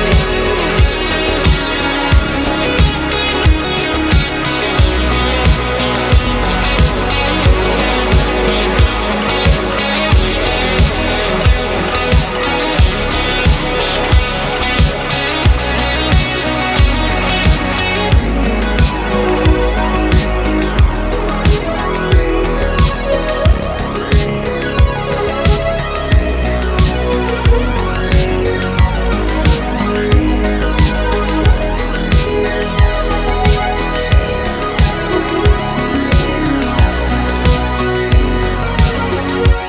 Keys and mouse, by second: 0.5-2.8 drag, 3.7-4.9 drag, 5.4-8.9 drag, 9.4 middle click, 12.2-13.2 drag, 14.0-15.1 drag, 18.6 middle drag, 19.2 click, 19.5 middle click, 20.5 g, 21.4 click, 21.5 middle click, 23.7 Escape, 23.8 Escape, 24.3 ctrl+z, 24.6 middle click, 25.4 middle drag, 26.1 click, 27.8 click, 28.5 middle click, 29.3 r, 30.1 Escape, 30.5 click, 31.3 r, 33.1 Escape, 33.4-34.0 middle drag, 36.3-38.2 drag, 39.3 click.